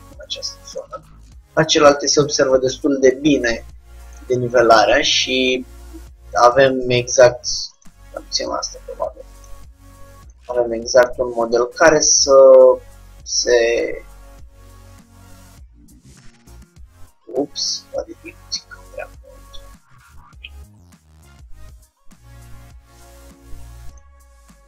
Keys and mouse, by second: 0.6-5.0 middle drag, 6.2 middle click, 8.0-13.3 drag, 8.6 Tab, 13.6-15.2 drag, 23.5 Tab, 24.1-24.6 drag.